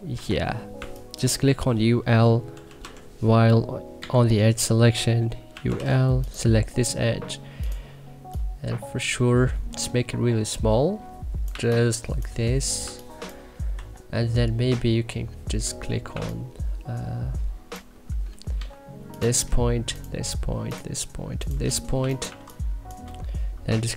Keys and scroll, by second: 0.0-0.7 typing, 2.4-3.9 typing, 5.3-6.2 typing, 11.5 1, 13.7 e, 16.1 1, 18.5 w, 21.9 2, 22.2 1.